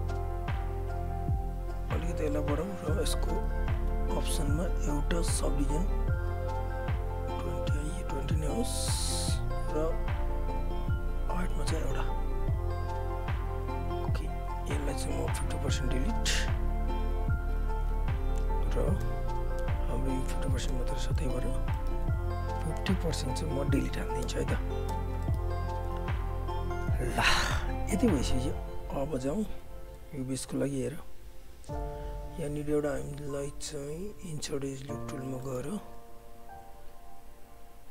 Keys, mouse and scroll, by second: 0.0 click, 3.4 t, 5.5 click, 8.9 Return, 10.8-13.8 drag, 13.8 right click, 15.0 click, 17.5 Delete, 18.2 alt+click, 19.0 space, 21.1 alt+middle click, 21.4 alt+right click, 21.7 alt+middle click, 22.1 click, 23.6 Delete, 24.2 space, 25.2 alt+middle click, 25.4 alt+right click, 25.6 alt+click, 25.9 w, 26.0 right click, 26.9 alt+click, 27.4 alt+middle click, 27.5 alt+right click, 27.7 alt+click, 28.3 right click, 30.1 alt+click, 30.7 right click, 31.6 click, 35.4 alt+middle click, 35.6 alt+right click, 36.5 click.